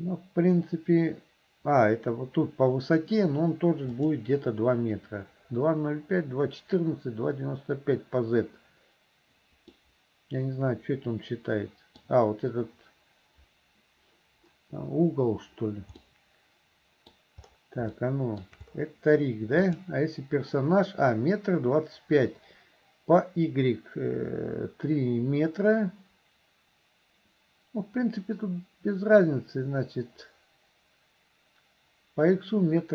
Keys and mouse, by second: 4.0 click, 9.8-12.0 middle drag, 16.1-17.2 middle drag, 18.0 shift+middle click, 19.6 click.